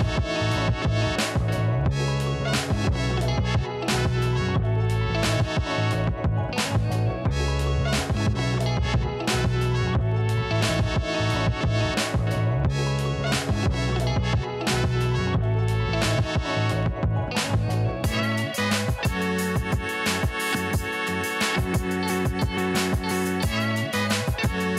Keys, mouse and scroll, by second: 1.5 Down, 3.1 click, 4.0 right click, 4.3-8.5 drag, 8.5 ctrl+t, 9.6-10.9 drag, 10.9-14.8 drag, 15.0 alt+Num_Lock, 15.0 click, 15.5 click, 16.3 click, 17.3 click, 19.1 Left, 20.0 Down, 22.1-23.0 alt+scroll up 3, 23.2 right click, 23.5 click, 23.7 alt+scroll up 1.